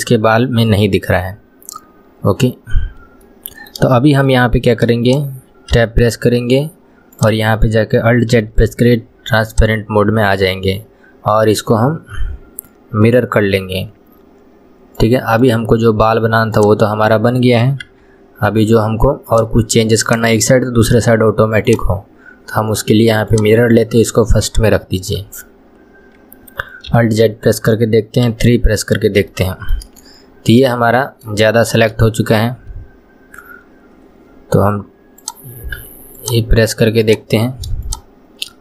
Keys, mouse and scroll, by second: 0.5-1.7 scroll down 1, 3.3-5.1 shift+middle drag, 5.1 click, 7.2-8.4 drag, 8.4 alt+z, 9.5 click, 15.5-18.0 right drag, 18.0 Tab, 19.3 drag, 20.1-23.2 drag, 23.3-23.9 drag, 25.8-26.9 scroll up 2, 26.9 alt+z, 28.3 KP_3, 29.3-30.4 shift+middle drag, 30.4 scroll up 1, 30.8-35.1 shift+middle drag, 35.3 click, 36.2 click, 37.9 shift+click.